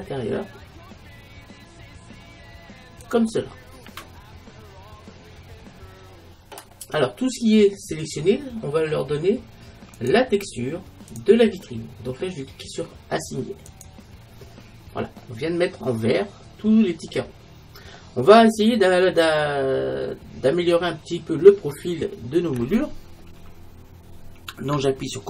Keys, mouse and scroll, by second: 3.2-5.0 drag, 3.6-5.3 middle drag, 5.4 middle click, 11.3-12.9 drag, 13.7-15.8 drag, 15.2 right click, 15.3 middle click, 17.4-19.3 middle drag.